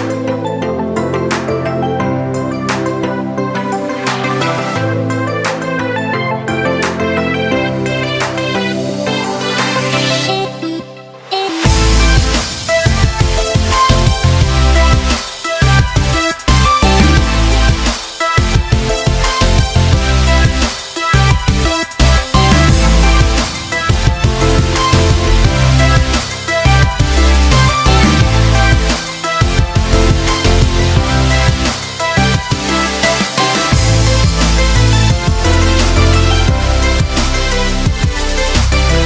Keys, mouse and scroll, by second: 0.1-5.0 shift+drag, 5.0-11.5 shift+drag, 13.2 Down, 15.5 click, 17.7 Down, 23.6 Up, 27.4-34.2 drag, 34.2 ctrl+z, 34.7-39.0 shift+drag.